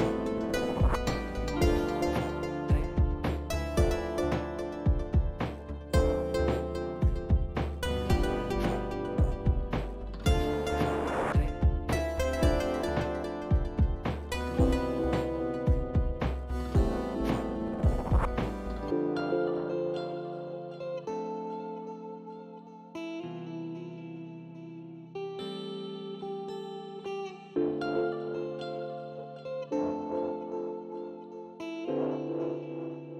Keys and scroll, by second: 25.6 Delete, 32.3 ctrl+s.